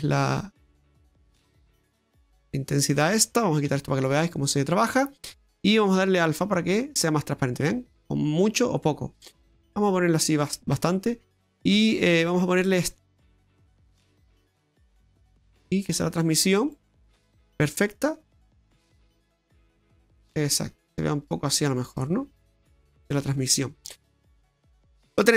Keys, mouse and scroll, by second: 2.5 middle click, 3.7 Tab, 4.2 middle click, 5.9 click, 12.6 click, 15.6 click, 18.3 click, 22.0 middle click.